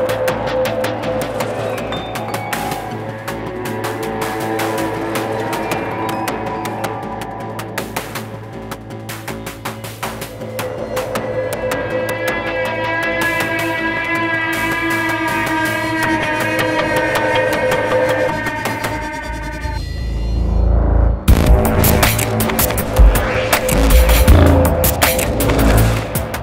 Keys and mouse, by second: 0.0-1.9 drag, 2.2-3.5 drag, 4.4 click, 6.4 click, 7.7-9.5 drag, 9.6-10.6 drag, 12.4-13.4 drag, 15.7 click, 16.9-18.3 drag, 18.3-19.3 drag, 20.7-21.7 drag, 22.9-23.9 drag, 25.4-26.4 drag.